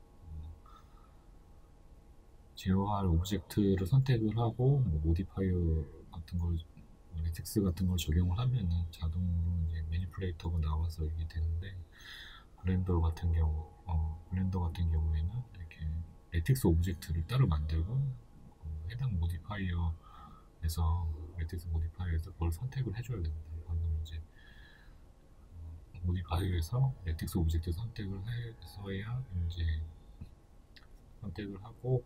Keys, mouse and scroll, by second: 0.1-0.5 scroll up 2, 1.2-3.7 scroll down 2, 3.7 right click, 4.7 right click, 6.8-11.1 drag, 10.6 Return, 11.1-11.6 middle drag, 11.6 right click, 13.9-14.8 drag, 14.9-17.9 shift+middle drag, 15.2 scroll down 1, 16.3-16.7 scroll up 1, 17.9 click, 19.6 middle click, 19.9 scroll down 1, 20.3 right click, 20.8 right click, 21.2 Tab, 23.1 middle click, 23.6 right click, 24.4 shift+right click, 24.8 shift+right click, 25.2 middle click, 25.8 shift+right click, 26.3-30.6 shift+middle drag, 26.9 s, 30.6 click, 30.8-32.0 middle drag.